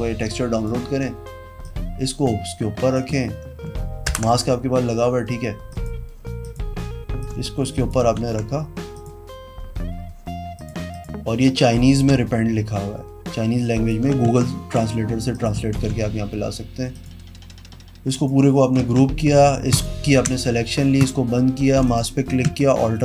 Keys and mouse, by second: 1.8 click, 3.2 click, 4.3 ctrl+BackSpace, 5.9 click, 6.6 click, 7.4 shift+click, 8.4 ctrl+z, 9.2 click, 10.7 click, 11.1 click, 12.2 click, 13.3 shift+click, 14.5 ctrl+a, 15.5 click, 15.9 ctrl+d, 17.1 click, 18.3 click, 19.9 ctrl+click, 21.2 click, 22.0 click.